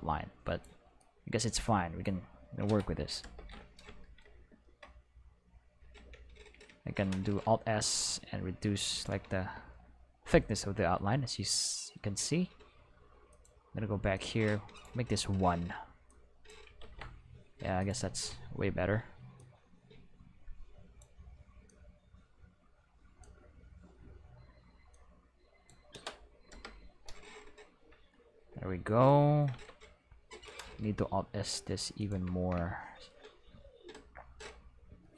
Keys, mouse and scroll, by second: 1.0-2.0 drag, 3.2 Return, 6.0 Tab, 6.5 a, 7.3 alt+s, 9.0 click, 11.3 middle click, 13.3 click, 14.2 click, 14.6 1, 14.8 click, 16.1 click, 16.8 ctrl+z, 17.8 click, 19.4-21.0 drag, 21.7-23.2 drag, 24.9 click, 26.5 Return, 29.6 Tab, 30.8 alt+s, 32.0 click.